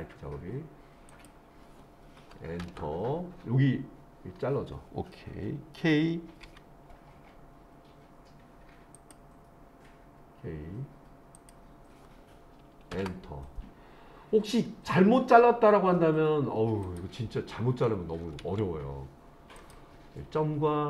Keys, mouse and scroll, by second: 6.5 k, 16.8 click.